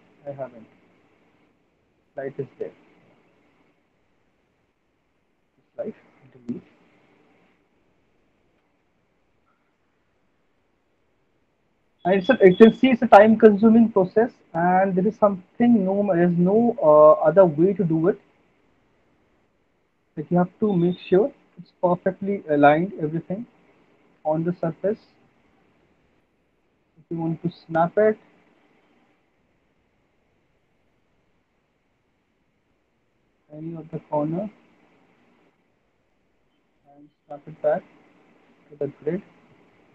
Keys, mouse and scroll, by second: 3.2 click, 3.5 click, 4.8 middle click, 5.0 middle click, 5.8 click, 6.5 Delete, 7.0 click, 7.6 middle click, 8.0 alt+middle click, 8.7 w, 9.9 click, 10.7 click, 12.2 alt+middle click, 12.2 click, 13.4 click, 14.2 alt+middle click, 14.6 middle click, 15.7 click, 18.6 alt+middle click, 21.0 click, 21.4 alt+middle click, 21.8 middle click, 22.0 middle click, 22.2 alt+middle click, 22.5 middle click, 24.1 middle click, 24.2 alt+middle click, 28.5 click, 30.7 click, 31.7 click, 34.3 click, 35.0 middle click, 35.8 click, 39.0 click.